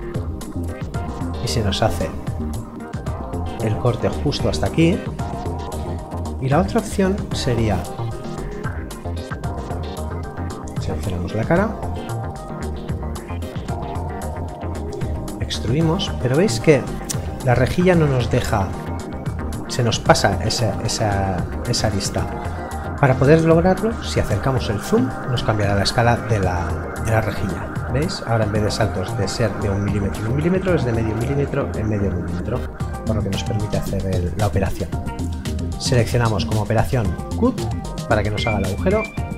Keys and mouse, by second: 5.6 click, 8.1 e, 8.9 middle click, 11.0 click, 11.9 middle click, 13.2 click, 25.7 click, 29.9 click, 38.8 click.